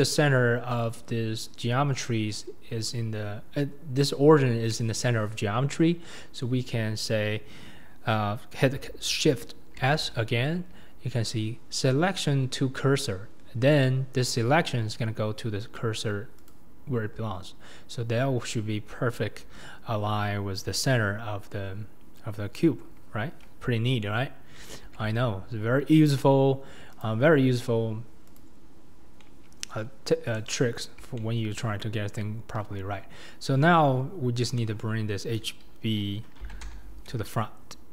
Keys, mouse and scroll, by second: 0.3-0.9 scroll up 1, 0.9-9.3 scroll up 1, 9.3-13.4 scroll up 1, 13.4-16.5 scroll up 1, 26.1 click, 27.0 click, 28.4 click, 29.0 scroll down 2, 29.2-29.8 middle drag, 29.8-30.3 scroll down 4, 30.3 KP_7, 30.8-31.2 scroll down 1, 31.2-31.6 shift+middle drag, 31.6-32.6 scroll up 4, 32.6 KP_1, 34.6 KP_7, 36.5 g.